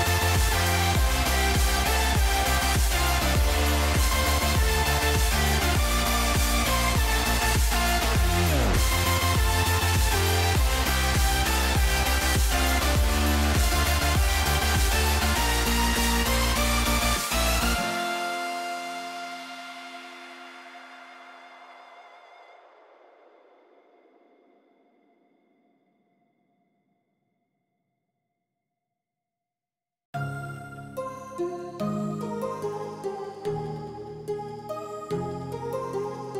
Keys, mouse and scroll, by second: 0.7 g, 3.3 click, 3.9 g, 6.6 shift+middle click, 6.9 ctrl+s, 7.9 shift+middle click, 8.1 shift+middle click, 8.8 click, 9.6 shift+middle click, 11.3 shift+middle click, 11.7 s, 18.4 r, 19.9 a, 20.5 r, 23.6 r, 30.4 r, 34.0 s, 36.2 g.